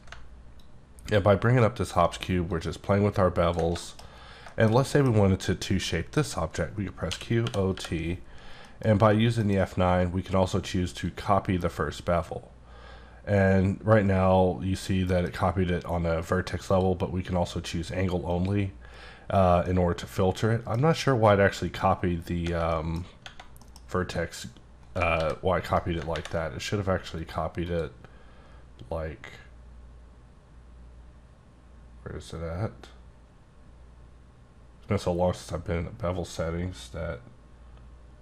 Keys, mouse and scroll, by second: 0.6-2.1 ctrl+drag, 3.8 shift+middle click, 4.1-4.4 scroll up 3, 4.4 shift+middle click, 5.8 middle click, 7.1 q, 7.4 o, 7.7 t, 8.6 middle click, 9.4 F9, 11.0 click, 15.1 F9, 16.7 click, 18.3 click, 19.6 middle click, 21.7 scroll up 1, 22.0-22.4 scroll down 1, 22.7 middle click, 23.6 middle click, 25.1 g, 25.3-25.6 scroll down 1, 25.6 right click, 27.2 click, 27.6 click.